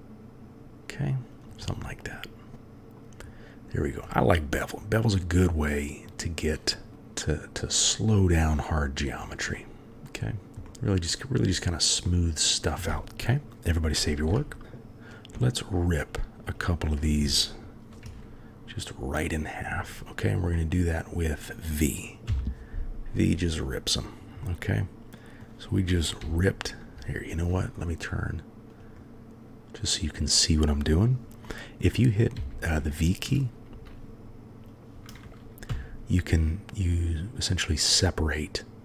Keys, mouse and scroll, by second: 1.7-2.7 drag, 2.7 middle drag, 4.1-6.0 middle drag, 6.9 g, 7.2-7.7 middle drag, 8.7-9.2 middle drag, 9.5-10.1 drag, 10.7-11.1 drag, 12.0-12.5 drag, 14.1 ctrl+s, 15.5-17.1 shift+middle drag, 18.0 KP_3, 20.5-21.0 middle drag, 22.3 v, 24.4-25.0 middle drag, 25.0-25.4 drag, 26.2 g, 31.4-31.9 drag, 32.3 g, 34.6 click, 35.7 g.